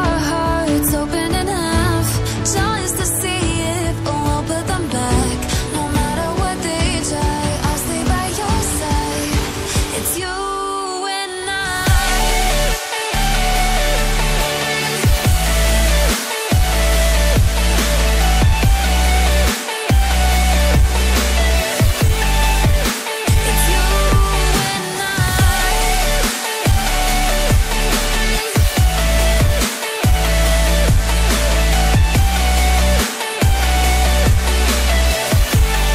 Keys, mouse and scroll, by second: 0.2 click, 0.9 click, 1.6 click, 2.5 click, 5.2 right click, 5.9 click, 6.8 double click, 9.7 double click, 10.1 click, 12.7-13.2 scroll down 1, 13.2-13.6 scroll up 1, 13.6 click, 14.1 double click, 15.4 click, 18.2 click, 18.5-20.5 scroll down 1, 21.0 scroll up 1, 22.0 click, 22.4 scroll down 1, 23.6 scroll down 1, 24.5-26.3 scroll up 1, 26.3 click, 28.2 shift+click, 29.7 shift+click, 32.5 click, 34.7-35.1 scroll down 1, 35.1 click.